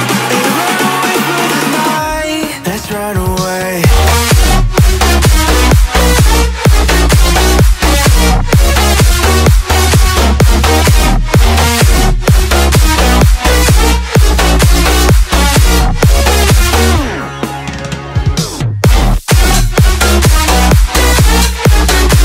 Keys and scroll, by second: 10.7 Down.